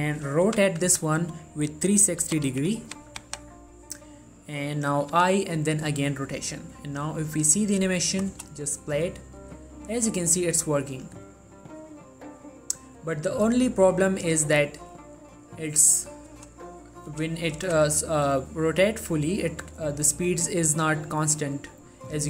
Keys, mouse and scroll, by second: 0.6 r, 1.0 z, 5.3 i, 5.9-8.5 drag, 8.5 space, 16.5 space, 20.2-22.2 drag.